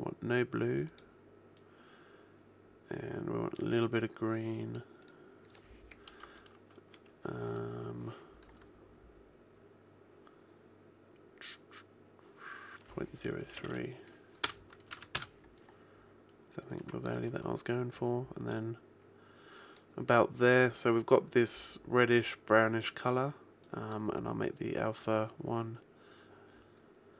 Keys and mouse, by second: 0.9 click, 22.7 click.